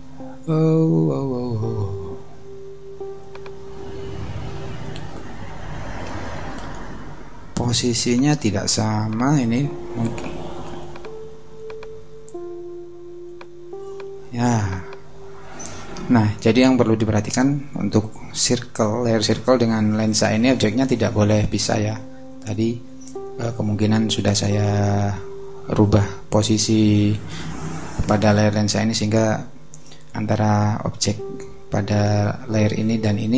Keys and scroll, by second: 6.1 super+d.